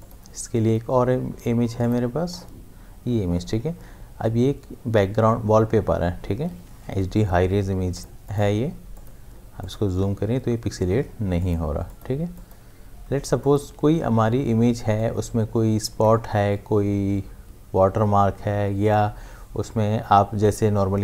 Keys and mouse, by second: 0.0 click, 7.7 ctrl+space, 8.0 ctrl+click, 8.2 ctrl+space, 9.8 ctrl+space, 11.4 ctrl+alt+click, 14.7 space, 15.0 click, 15.2 space.